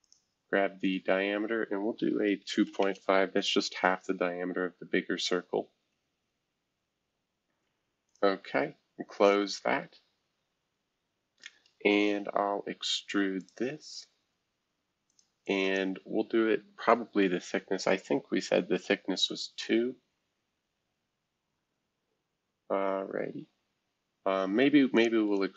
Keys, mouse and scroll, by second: 0.0-1.6 drag, 2.1-3.1 typing, 4.1-5.6 scroll down 1, 5.6-7.6 scroll down 1, 5.6 typing, 8.1-9.5 drag, 9.5 scroll down 1, 13.4-14.9 drag, 15.1-17.2 drag, 17.9 2, 18.3 Return, 20.4-22.5 scroll down 2, 22.5-24.0 scroll up 2, 24.9-25.5 drag, 25.2 right click.